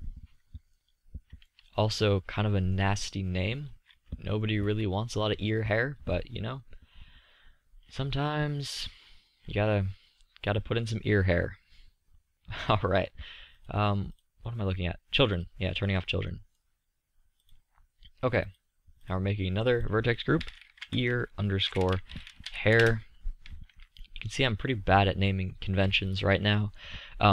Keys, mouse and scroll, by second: 2.2-4.1 middle drag, 5.7-16.9 middle drag, 16.9-17.7 drag, 18.6 click, 25.0 middle drag.